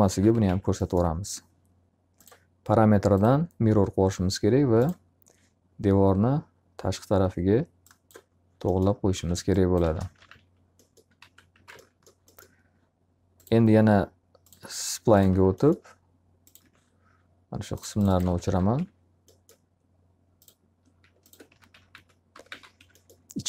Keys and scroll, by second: 0.0-1.0 typing, 8.7 space, 9.9-11.5 typing, 11.7 alt+a, 15.3 alt+r, 18.2 alt+a, 18.5 q, 18.7 F3, 21.2-23.0 typing.